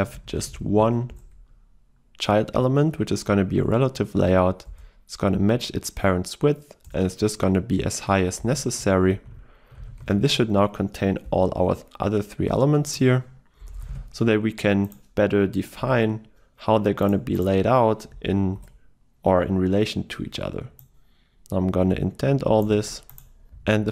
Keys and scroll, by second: 1.3 Return, 4.7 Return, 11.6 ctrl+x, 13.8 ctrl+x, 14.0 ctrl+v, 22.8 Tab.